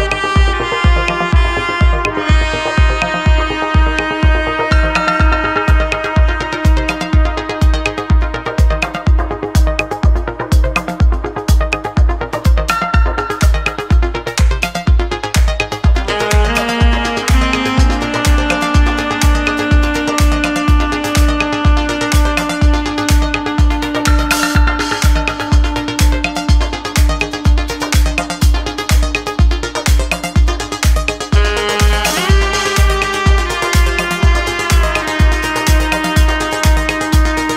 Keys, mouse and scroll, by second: 0.0-1.1 drag, 1.3 ctrl+z, 1.7 click, 2.3-3.3 drag, 3.5 ctrl+z, 4.2-4.9 middle drag, 7.4-9.0 drag, 9.2 ctrl+z, 11.1 click, 11.4 shift+middle click, 13.5-15.1 drag, 15.3 ctrl+z, 16.4 click, 17.4-18.8 drag, 19.1 ctrl+z, 19.6 click, 20.0 shift+click, 20.6 click, 22.0-24.5 drag, 24.8 ctrl+z, 25.2 click, 26.5-30.1 drag, 30.3 ctrl+z, 31.7-33.3 drag, 33.5 ctrl+z, 34.2 click, 35.7-36.7 drag, 36.8 ctrl+z, 37.1 click.